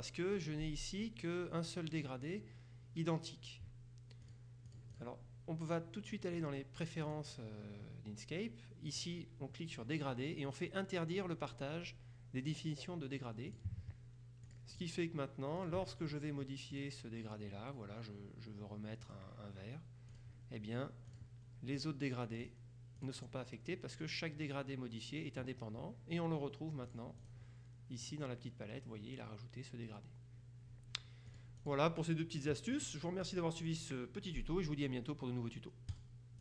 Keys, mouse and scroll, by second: 0.4 click, 4.4-5.6 drag, 7.1 click, 9.0 click, 13.6 click, 14.5-15.4 drag, 15.7 click, 16.8 click, 19.1 click, 20.2 click, 21.2 click, 21.8 click, 22.5 click, 27.0-27.8 drag, 28.2 click, 31.4 click, 32.8-33.9 drag, 36.0 click.